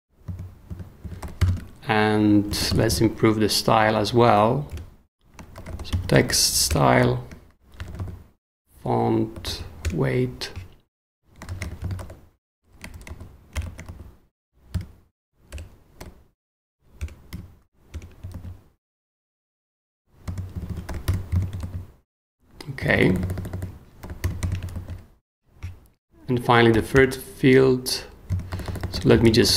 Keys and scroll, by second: 0.7 super+l, 1.0-3.4 typing, 4.7 Return, 5.3-9.9 typing, 11.2-16.0 typing, 17.0 Return, 17.3 ., 17.9 Return, 18.3 super+s, 20.5 super+l, 21.0 ,, 21.6 super+s, 22.8-24.7 typing, 24.7 super+s, 26.7 i, 26.9 Return, 28.5 super+j, 28.7-29.5 typing.